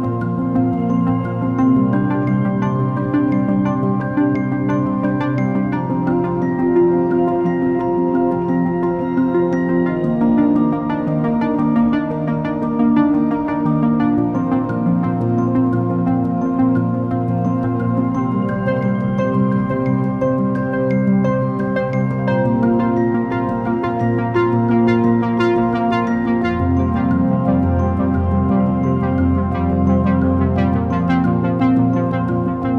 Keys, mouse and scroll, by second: 1.1 click, 2.0 click, 3.2 ctrl+click, 4.5 e, 7.1-8.8 middle drag, 8.8 ctrl+r, 13.3 click, 13.3-14.9 middle drag, 14.9 click, 15.8 shift+click, 16.9 shift+click, 17.7 shift+click, 18.4-20.4 middle drag, 20.4 e, 24.8-29.1 middle drag, 29.1 ctrl+r.